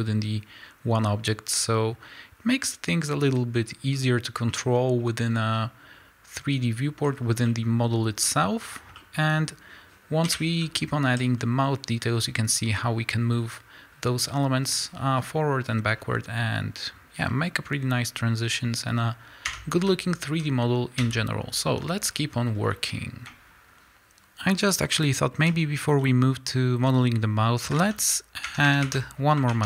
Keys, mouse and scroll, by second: 5.3 scroll down 2, 7.1-7.5 scroll up 2, 7.7-8.2 scroll down 2, 8.7 scroll down 2, 9.2-9.8 scroll up 1, 10.2 KP_1, 11.2 z, 11.4 scroll up 1, 14.8 scroll down 1, 15.2 scroll up 1, 15.9 scroll down 1, 19.5 Tab, 19.9 z, 21.0 a, 21.8 scroll up 1, 22.1 scroll down 1, 23.9 click, 26.9 z.